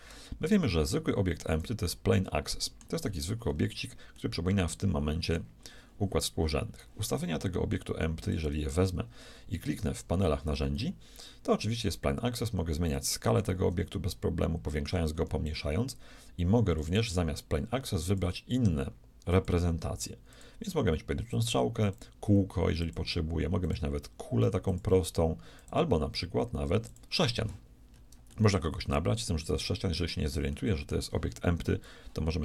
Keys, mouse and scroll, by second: 2.3-7.3 middle drag, 8.2-14.9 drag, 16.7-18.5 drag, 19.3-21.1 drag, 21.3-27.5 drag, 27.9-30.1 middle drag, 30.5-32.4 middle drag.